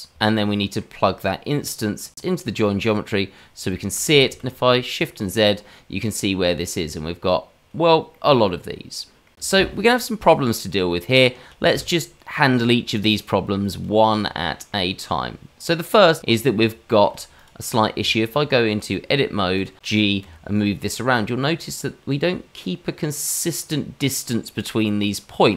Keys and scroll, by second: 4.2 shift+z, 17.9 Tab, 20.2 g.